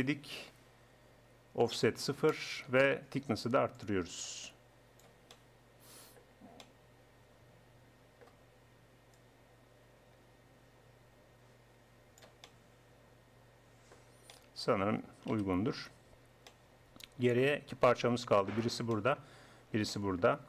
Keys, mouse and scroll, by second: 1.7-3.5 drag, 3.5 middle click, 3.8-5.7 drag, 6.1-7.3 middle drag, 7.3 middle click, 9.2-11.0 drag, 11.0-12.5 middle drag, 15.3 KP_1, 18.5-19.9 middle drag, 20.0 middle click.